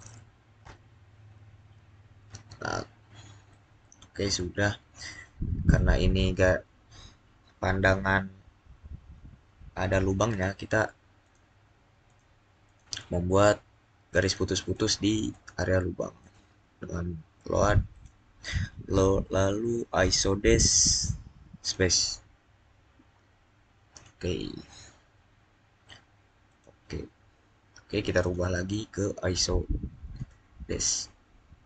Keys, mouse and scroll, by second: 0.0-0.2 typing, 0.4 Return, 2.4 scroll up 1, 3.3 middle click, 4.1-5.0 scroll up 2, 5.0-7.9 middle drag, 11.0 middle click, 11.5 click, 14.7 click, 21.4 click, 23.8 click, 26.3 click.